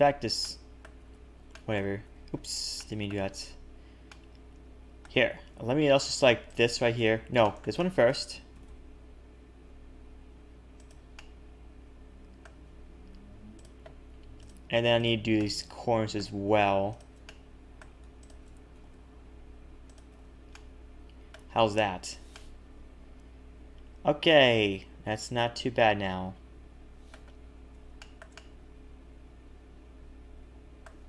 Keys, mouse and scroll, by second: 0.4 middle click, 1.0 ctrl+z, 1.1 ctrl+z, 1.5 middle click, 2.1 ctrl+z, 2.3-2.7 scroll down 5, 2.7 shift+middle click, 3.4-4.1 scroll up 4, 4.1 middle click, 6.5 shift+click, 7.1 ctrl+z, 7.4 shift+middle click, 7.8 middle click, 8.5 s, 11.1 middle click, 13.6 click, 14.4 click, 14.9 shift+click, 15.3 middle click, 16.9 shift+click, 17.2 middle click, 18.2 shift+click, 18.7 s, 20.1 a, 20.2 a, 20.5 middle click, 21.6 Tab, 21.9-23.1 scroll down 4, 22.3 middle click, 27.4-28.0 scroll up 3, 28.0 shift+middle click, 28.3 middle click.